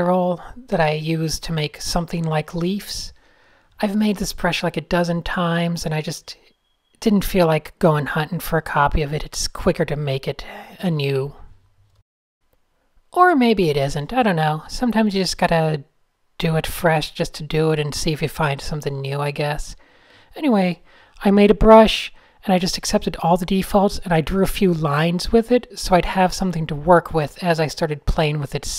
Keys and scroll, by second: 1.6 super+-, 1.7 super+n, 1.8 shift+super+a, 3.8 n, 6.2 shift+x, 7.4-10.2 typing, 12.5 Tab, 23.8-25.0 typing, 26.3 Escape, 26.7 shift+super+a, 26.8 n, 28.3 d.